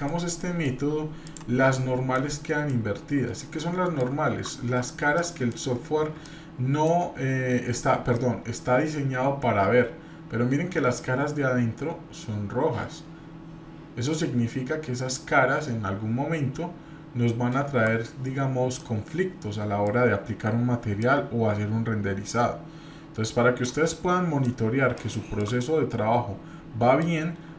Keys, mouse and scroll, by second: 0.4-0.7 middle drag, 1.2 click, 1.6 scroll up 1, 2.2 middle click, 3.6-4.1 shift+middle drag, 4.7-5.1 scroll up 1, 5.2-5.6 shift+middle drag, 5.8-6.2 scroll up 1, 6.2-7.0 shift+middle drag, 7.4-7.8 scroll up 1, 8.1 shift+scroll down 1, 8.1-18.0 shift+middle drag, 18.2-18.7 scroll down 3, 18.8-19.9 middle drag, 21.0-23.7 drag, 23.9-24.5 middle drag, 24.8 scroll up 1, 25.5-27.0 middle drag.